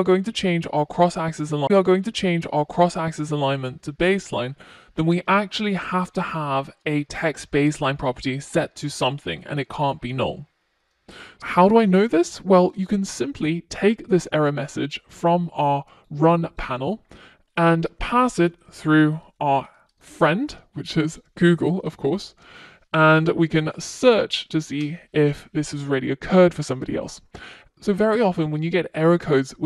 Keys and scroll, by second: 20.9 super+c.